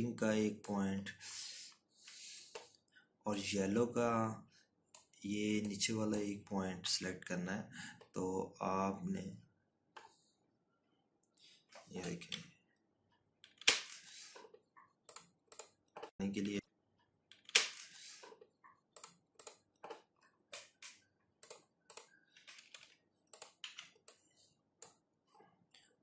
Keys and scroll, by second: 14.7 Right, 15.9 Left, 21.0 ctrl+-, 21.2 ctrl+-, 22.1 z.